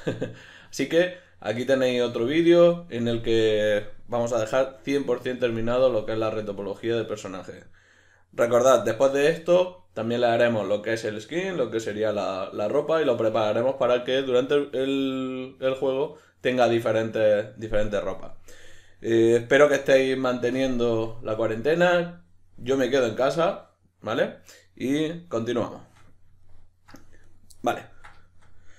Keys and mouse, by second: 18.8-22.8 middle drag, 25.8-27.2 shift+middle drag, 27.2 right click, 27.6-28.7 middle drag.